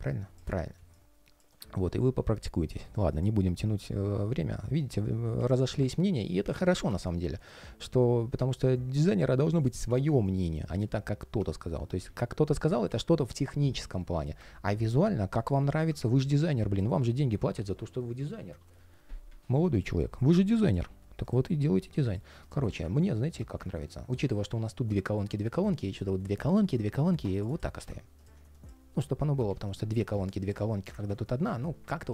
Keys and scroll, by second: 30.7 super+z, 31.3 super+z.